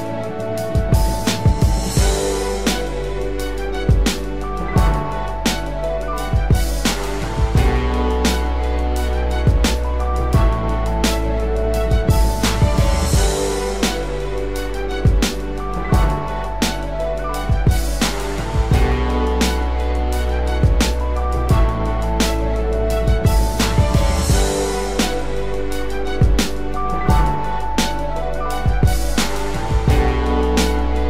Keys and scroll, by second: 7.6 ctrl+-, 8.2 ctrl+=, 10.7 ctrl+-, 15.8 ctrl+a, 19.3 ctrl+d, 22.6 ctrl+z.